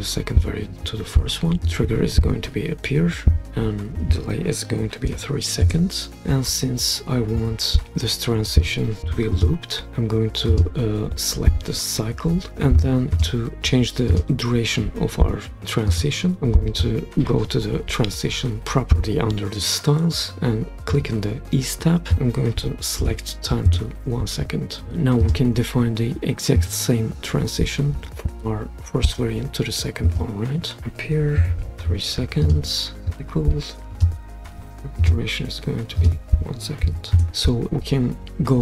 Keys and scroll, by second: 5.1 3, 5.6 Return, 23.0 1, 23.7 Return, 31.4 BackSpace, 31.6 3, 31.8 Return, 36.8 1, 37.1 Return.